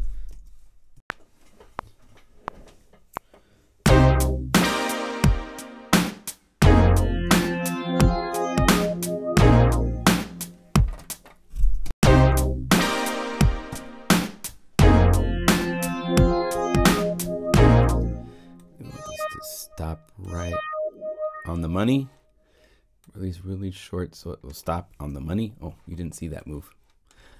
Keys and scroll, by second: 0.3 0, 0.9 *, 10.9 0, 11.8 Home, 13.6 p.